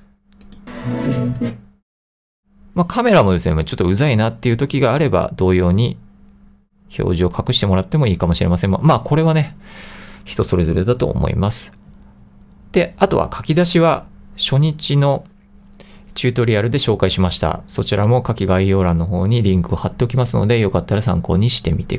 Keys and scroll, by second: 9.1 super+z.